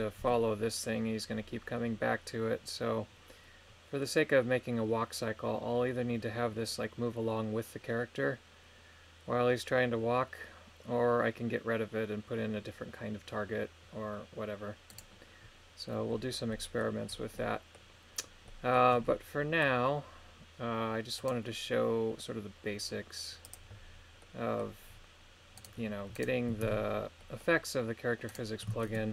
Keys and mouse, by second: 0.2 g, 14.9 right click, 16.5 middle click, 17.4 middle click, 18.4 middle click, 21.2 right click, 23.4 click, 24.2 middle click, 25.6 right click, 26.2 right click, 26.7 ctrl+Tab, 27.2 middle click, 28.3 right click, 28.8 shift+middle click.